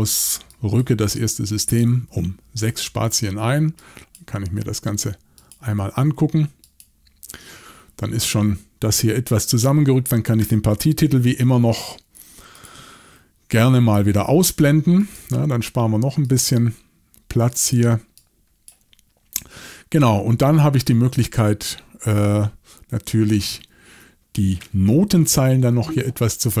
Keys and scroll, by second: 1.8 6, 11.0 shift+super+l, 25.5 shift+super+l.